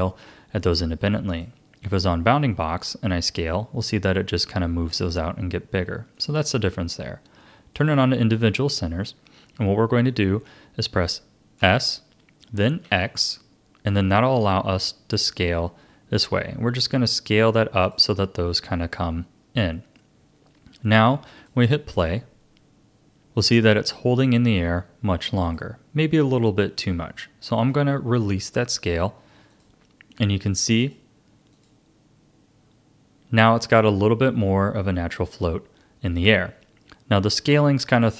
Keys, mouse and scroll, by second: 1.3-3.2 drag, 3.2 s, 6.1-9.1 drag, 11.6 s, 21.4-24.4 drag, 25.4-27.7 drag, 27.7 s, 30.8-34.5 drag.